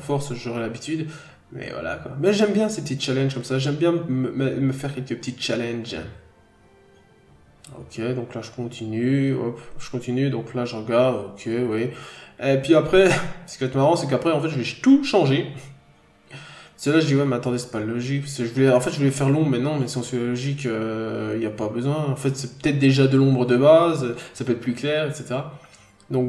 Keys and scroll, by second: 2.0-2.4 scroll down 1, 4.0 n, 5.7 scroll up 1, 5.9 n, 6.6 b, 7.1 n, 8.2 b, 10.6 b, 11.2 n, 11.4-12.0 scroll down 1, 12.1 scroll up 1, 12.6-13.0 scroll down 1, 17.5 scroll down 1, 17.7 n, 18.9 scroll down 1, 20.3-20.6 scroll down 1, 22.9-23.3 scroll down 1, 23.6-24.0 scroll up 1, 25.0-25.5 scroll up 1.